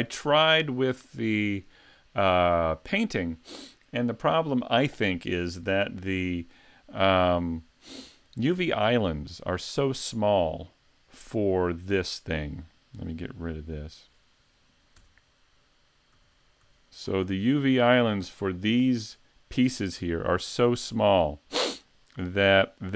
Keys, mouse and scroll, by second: 8.3 click, 9.7 click, 13.2 click, 14.0 right click, 15.1 Tab, 16.2 a, 16.8 a, 17.9-19.0 scroll up 14, 19.0-19.6 scroll down 1, 19.6 scroll down 1.